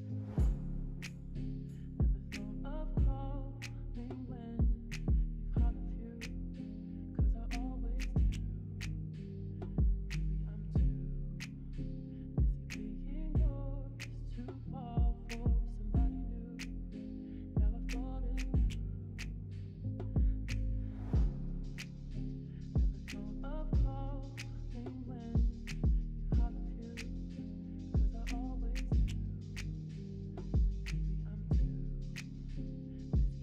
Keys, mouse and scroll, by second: 2.8-4.4 s, 4.7 middle click, 8.0 middle click, 10.6 middle click, 12.7 click, 14.2 click, 15.6 click, 16.3 middle click, 19.7 middle click, 23.0 shift+click, 23.5 shift+click, 24.4 middle click, 27.2 s.